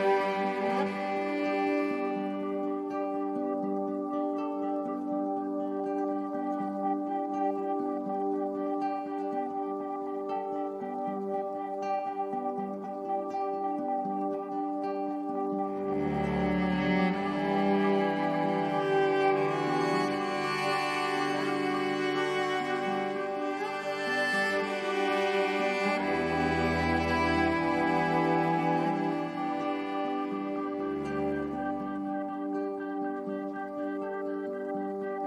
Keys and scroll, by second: 1.1 shift+Up, 3.1 Down, 16.4 i, 26.0 8, 26.9 8, 27.3 Return, 32.5 8, 32.8 Return.